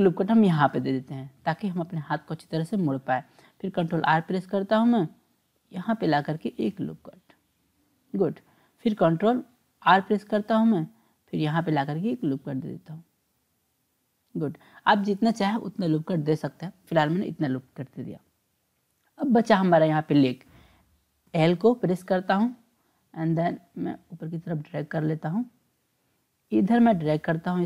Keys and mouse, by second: 3.9 ctrl+r, 9.8 ctrl+r, 19.2 click, 21.3 l, 21.4 l, 24.1-25.7 drag, 26.7-27.6 drag.